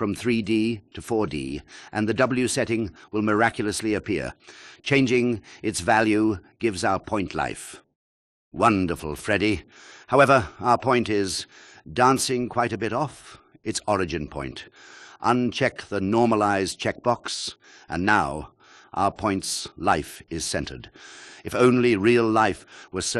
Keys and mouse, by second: 0.4-1.7 drag, 2.6-4.3 drag, 8.0-12.5 drag, 17.0 click, 18.2-20.8 drag, 22.2 click.